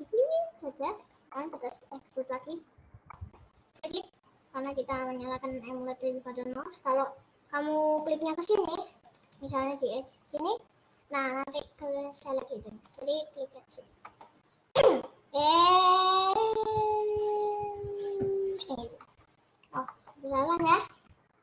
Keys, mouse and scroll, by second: 1.5 middle click, 2.2 click, 3.1 middle click, 3.8 click, 4.7 click, 8.1 click, 9.3 click, 10.4 click, 13.0 click, 13.2 click, 14.2-15.3 middle drag, 15.3 e, 19.2 middle click, 19.5 scroll up 3, 19.9 middle click, 20.4 KP_Add.